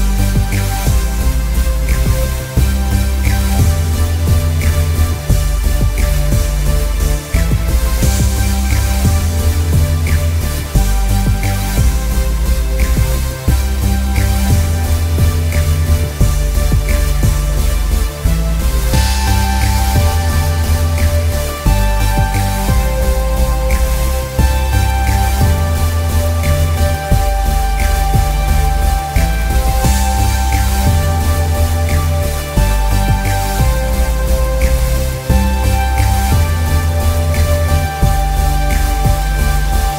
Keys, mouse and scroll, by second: 0.0 space, 0.3 click, 0.8 alt+scroll up 1, 6.0 space, 6.7 click, 6.9 alt+scroll down 1, 7.6 click, 8.6 click, 9.1 click, 9.6 click, 10.0 space, 10.2 click, 11.6 click, 11.9 click, 13.1 click, 13.4 scroll down 1, 14.1 click, 14.4-14.8 scroll down 1, 14.8 click, 15.3 click, 15.9 click, 16.7 click, 17.5 scroll up 1, 17.6 click, 17.7 scroll down 1, 17.8 click, 18.7 click, 20.1 click, 21.9 click, 22.7 click, 23.3 click, 26.1 click, 28.0 click, 28.6 scroll up 1, 28.8 click, 29.7 click, 32.2 alt+scroll down 1, 32.4 click, 32.9-33.2 scroll up 1, 33.2 click, 33.4 scroll down 1, 33.5 space, 33.6 click, 33.7 scroll up 1, 34.1 click, 34.9 click, 35.0 alt+scroll up 2, 35.3 click, 36.1 [, 36.3 click, 37.1 click, 37.2 scroll down 1, 37.5 click, 37.9 click, 38.9 click, 39.4 click, 39.5 scroll down 1.